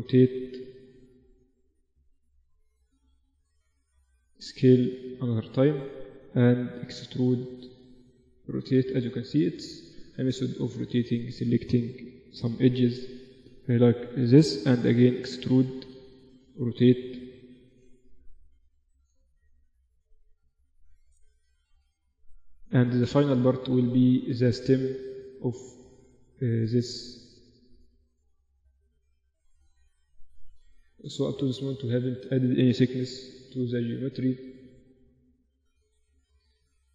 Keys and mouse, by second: 0.0-2.6 right drag, 1.9 r, 3.4 g, 4.5 s, 7.5 e, 8.7 r, 10.1 s, 13.2 r, 15.0 e, 16.7 r, 20.0-21.5 middle drag, 21.5 click, 21.5 right click, 21.6 middle click, 21.7 click, 21.8 middle click, 21.9 click, 21.9 right click, 22.2 middle click, 23.1 g, 24.9 g, 27.8 Tab, 28.0 Tab, 28.1-30.6 right drag, 29.3 e, 32.2 right click, 32.6-34.0 drag, 33.1 s, 34.4 middle click, 34.8 Tab, 35.4 click, 35.6 middle click, 36.7 Tab.